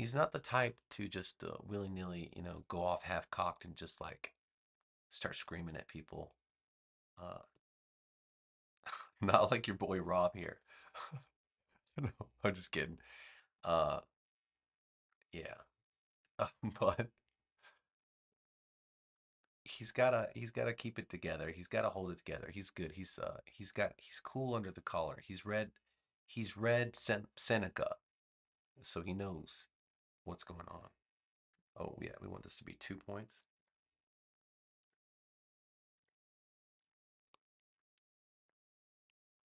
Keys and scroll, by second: 33.2 2, 33.5 Return, 34.7 v.